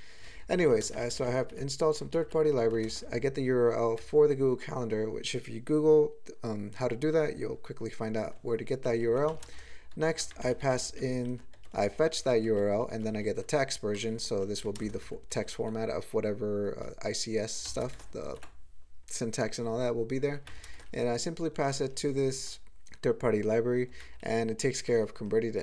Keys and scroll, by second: 0.2 ctrl+a, 0.3 ctrl+p, 0.4 ctrl+p, 0.5 ctrl+a, 0.8 ctrl+space, 0.9 ctrl+n, 1.1 ctrl+n, 1.2 ctrl+n, 1.5 ctrl+g, 2.1 ctrl+n, 2.2 ctrl+n, 2.7 ctrl+p, 2.9 ctrl+space, 4.0 ctrl+g, 8.9 ctrl+n, 9.3 alt+m, 9.5 ctrl+space, 9.5 ctrl+e, 9.9 ctrl+g, 10.3 alt+m, 10.4 alt+f, 10.6 alt+f, 10.9 alt+f, 11.3 alt+b, 11.5 alt+f, 11.7 alt+f, 12.0 alt+b, 12.2 alt+f, 12.5 alt+f, 12.7 alt+b, 12.9 alt+f, 13.1 alt+f, 13.3 alt+b, 13.9 alt+b, 14.1 alt+b, 14.3 alt+b, 14.8 ctrl+space, 15.0 ctrl+b, 15.3 ctrl+g, 17.7 alt+m, 17.9 ctrl+space, 17.9 ctrl+e, 18.3 ctrl+g, 20.5 alt+m, 20.7 ctrl+space, 20.7 ctrl+e, 22.1 ctrl+g, 24.0 alt+m, 24.3 alt+f, 24.5 alt+f, 24.9 alt+b.